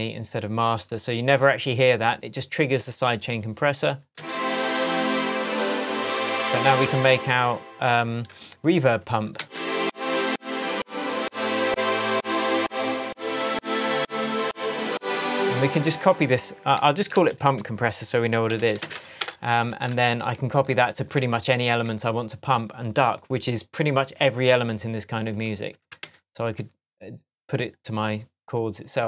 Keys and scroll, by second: 4.1 space, 6.6 space, 9.3 space, 15.2 space, 15.9 super+space, 16.7 super+r, 17.2 super+Left, 17.8 shift+Left, 17.9-19.0 typing, 19.7 super+Return, 19.8 super+c, 20.3 shift+super+Tab, 21.1 shift+Tab, 26.0 super+v.